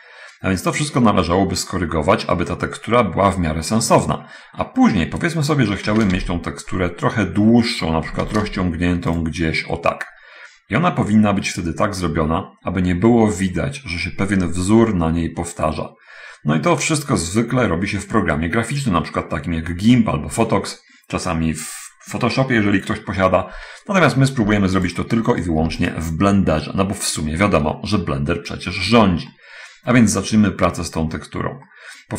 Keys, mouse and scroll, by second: 4.4-4.9 scroll up 1, 6.3 shift+d, 6.5 shift+x, 8.6 shift+d, 8.8 shift+x, 18.2 scroll up 1, 18.5-20.7 shift+middle drag, 24.5 x, 25.2 click, 25.8 right click, 26.0 click, 26.0 x, 27.5-27.8 scroll up 1, 27.8-28.4 scroll down 1, 28.4-28.9 scroll up 1, 29.6 shift+middle click, 32.0 middle click.